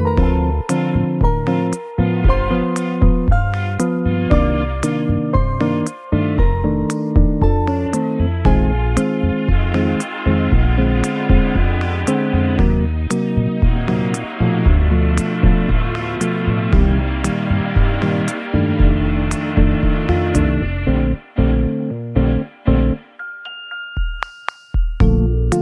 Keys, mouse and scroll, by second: 12.2 scroll down 3, 12.6 middle click, 14.3 KP_7, 16.1 shift+d, 17.3 r, 18.5 r, 20.2 g, 22.4 KP_0, 25.5 g.